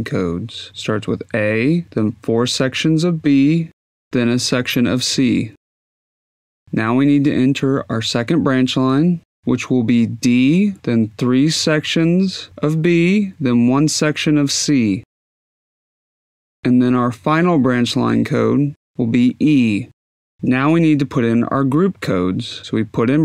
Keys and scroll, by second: 0.6 Tab, 1.1 b, 1.8 Tab, 2.3 b, 2.9 Tab, 3.3-5.5 typing, 3.7 Tab, 4.2 Tab, 15.3 d, 15.5 Tab, 16.3 b, 16.5 Tab, 16.6 c, 20.6 e.